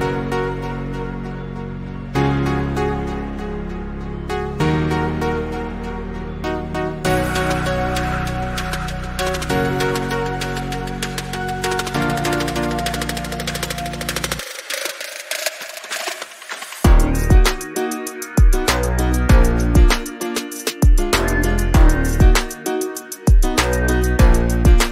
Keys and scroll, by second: 5.3 Down.